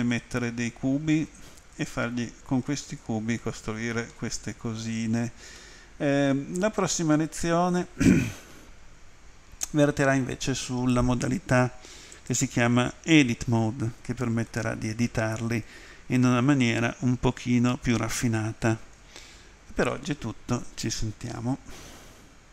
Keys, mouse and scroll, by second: 2.7 middle click, 5.6 middle click, 12.2 click, 14.5 middle click, 16.3 middle click.